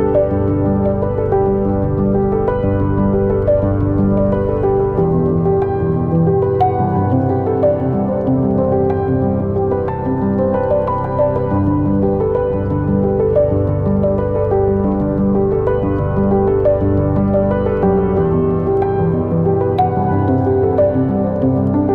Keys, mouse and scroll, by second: 0.1 right click, 4.2 shift+right click, 4.4 right click, 5.1 shift+right click, 5.3 right click, 7.4-12.1 drag, 12.1-14.8 shift+right drag, 14.8-16.1 drag, 16.1 right click, 16.8-21.3 drag, 21.3 scroll down 2, 21.5 scroll up 2, 21.8 click.